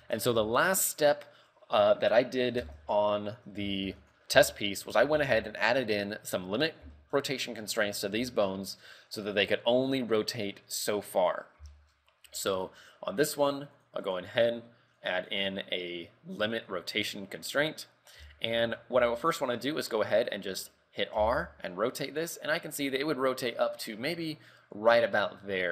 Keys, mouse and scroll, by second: 0.3 KP_3, 0.6 scroll down 5, 0.9 shift+middle click, 2.8 scroll up 4, 2.8 shift+space, 4.0 ctrl+w, 4.7 shift+middle click, 5.1 scroll up 3, 5.3 a, 5.5 shift+middle click, 6.7 click, 7.1 shift+middle click, 7.7 right click, 8.4 shift+middle click, 10.4 click, 11.3 click, 11.9 shift+middle click, 13.9 click, 14.2 click, 15.1 click, 15.5 click, 18.5 shift+middle click, 19.3 shift+middle click, 21.3 r.